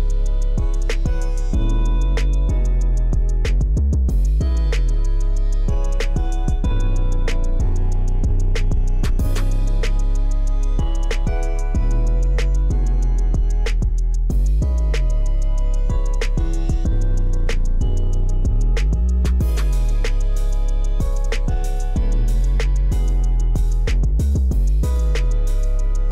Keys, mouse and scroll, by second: 5.3 KP_1, 5.7 KP_8, 5.8 KP_0, 6.5 Return, 9.0-9.8 middle drag, 12.4-13.8 drag, 14.0 middle click, 14.9-16.0 scroll up 1, 16.6 click, 18.2-24.0 drag, 24.3 middle click, 24.3-24.8 scroll down 1, 24.9 middle click, 25.5 middle drag, 25.5 scroll down 1.